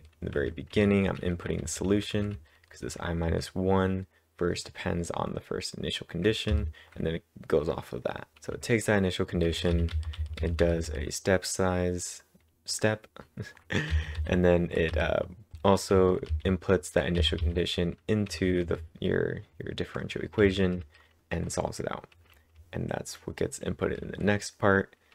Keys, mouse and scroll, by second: 2.2-3.7 typing, 6.5 typing, 8.5 typing, 9.6-10.9 typing, 13.9 typing, 15.3-17.9 typing, 21.9-23.8 typing.